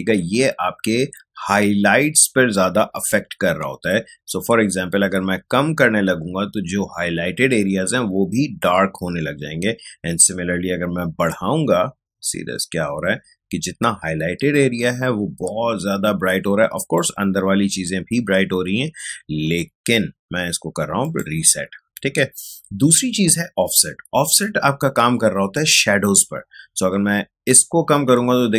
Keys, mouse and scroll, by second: 2.5-12.5 drag, 21.0 click, 24.2-28.5 drag.